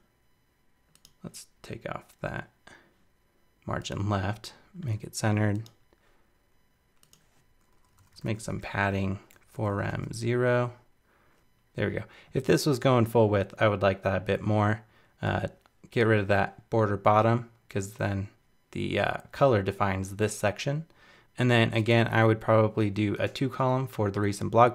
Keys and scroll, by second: 11.4 super+Right.